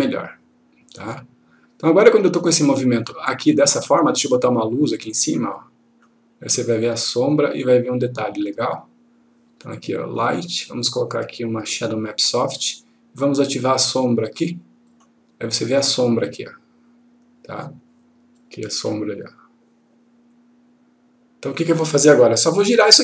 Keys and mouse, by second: 1.1-3.2 click, 3.4-4.4 click, 18.3-21.5 drag.